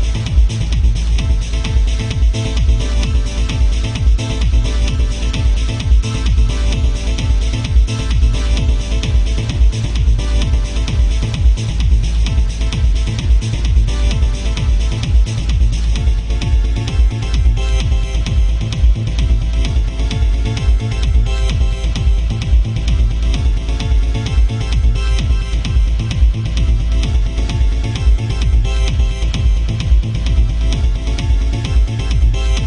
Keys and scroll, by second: 5.1 ctrl+z, 12.3 ctrl+z, 15.9 alt+space, 17.8 ctrl+z, 30.8 ctrl+z, 31.7 ctrl+z.